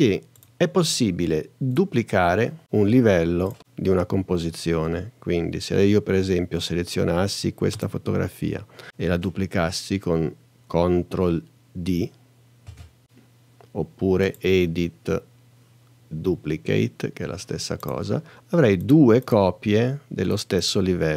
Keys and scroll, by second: 12.7 super+d.